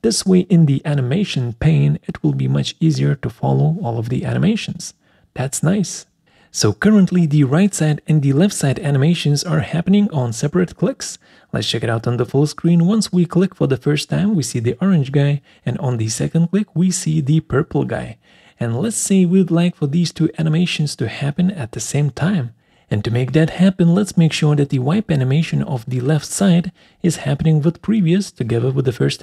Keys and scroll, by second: 0.0-0.7 typing, 1.7-2.7 typing, 3.0 Return, 20.9 Escape.